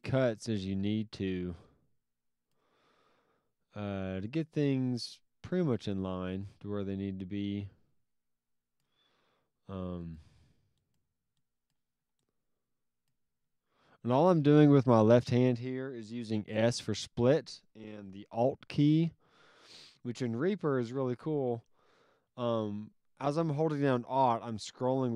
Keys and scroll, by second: 10.2 s.